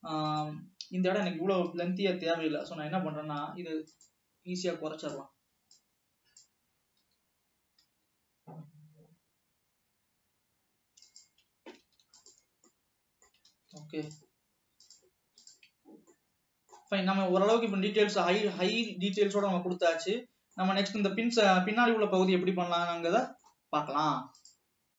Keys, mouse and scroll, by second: 0.5 middle click, 2.0 KP_3, 4.4 click, 5.3 click, 6.1 click, 7.1 g, 12.0 alt+a, 12.3 click, 12.8-14.0 middle drag, 14.0 ctrl+s, 15.6 click, 16.0 Tab, 16.3-17.4 middle drag, 17.4 scroll up 2, 17.7 scroll down 2, 17.9-18.8 middle drag, 18.8 scroll up 3, 19.7 ctrl+s, 19.9 scroll down 2, 20.1-22.9 middle drag, 22.9 scroll down 1, 23.2-24.1 middle drag, 24.1 scroll up 1.